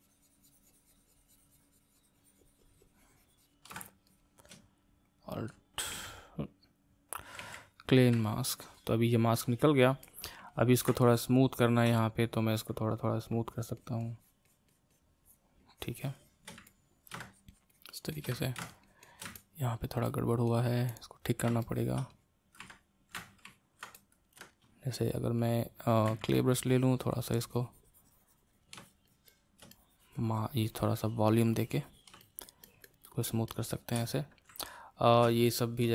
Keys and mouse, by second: 3.7-5.9 ctrl+shift+drag, 5.9 a, 7.4 a, 8.3-13.2 middle drag, 13.2-16.7 drag, 16.7 middle click, 17.4-19.4 shift+drag, 19.4-22.7 middle drag, 22.7 ctrl+click, 23.4-26.1 ctrl+middle drag, 26.1 c, 26.3-34.6 drag, 34.6 middle click, 35.5 shift+click.